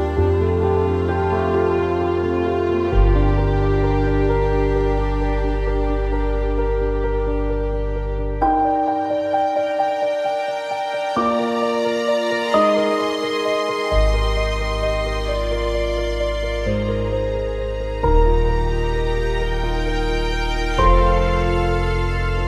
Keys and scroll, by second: 5.8 typing, 5.9 Return, 14.5 e.